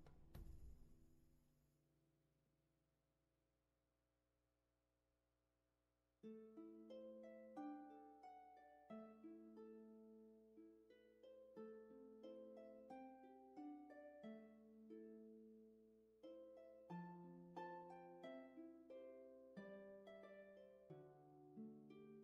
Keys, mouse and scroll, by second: 4.3 ctrl+z.